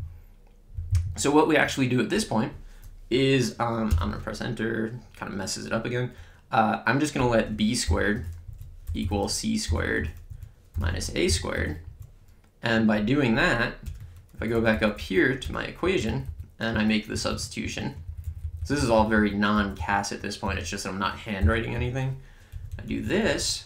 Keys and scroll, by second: 3.1 Right, 3.9 Return, 7.2-12.0 typing, 8.5 Right, 10.2 Right, 13.8 Return, 14.3 Up, 15.4 Return, 15.8 Left, 16.7 Down, 17.1 Right, 20.4 b, 21.3 ^, 21.7 2, 22.5 Right.